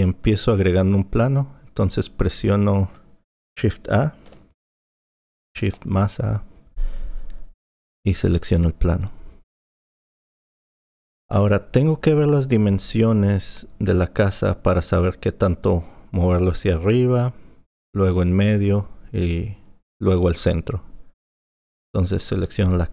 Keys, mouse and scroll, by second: 4.9 shift+a, 22.6 click.